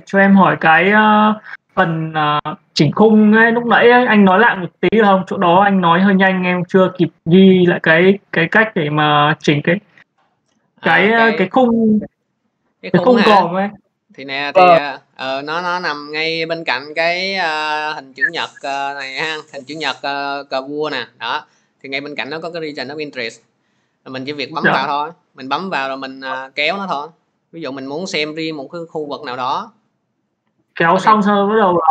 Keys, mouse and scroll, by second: 5.6 middle click, 8.1 click, 12.1 middle click, 17.1 middle click, 24.4-31.9 drag.